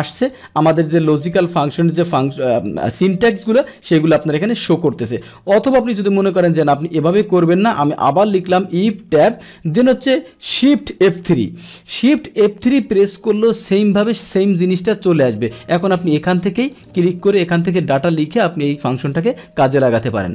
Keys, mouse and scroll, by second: 0.3 click, 1.4 click, 2.6 click, 3.5 click, 3.8 click, 4.2 click, 4.6 click, 5.7 click, 8.9 Tab, 10.9 shift+F3, 13.4-14.1 drag, 15.6 click, 16.7 click, 17.3 click, 19.1 click.